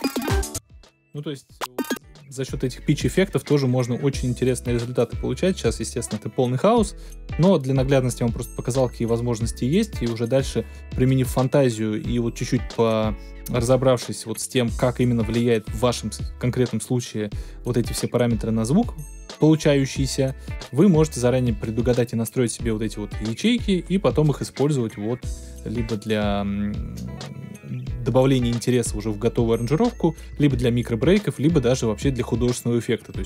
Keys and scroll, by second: 0.4 space.